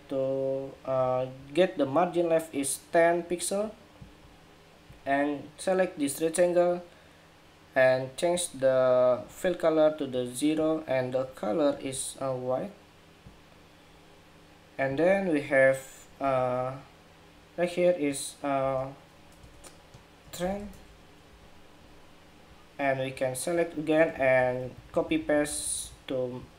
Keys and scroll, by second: 21.0 ⟲, 23.8 super+c, 24.1 super+v.